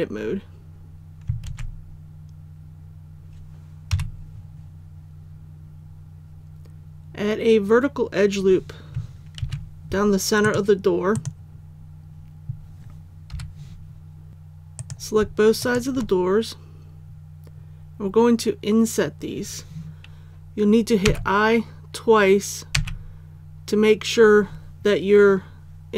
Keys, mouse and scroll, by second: 1.4 alt+a, 3.9 KP_1, 9.4 ctrl+r, 10.4 click, 13.3 3, 14.3 alt+a, 14.7 right click, 15.6 shift+right click, 16.8-17.3 scroll up 1, 21.0 i.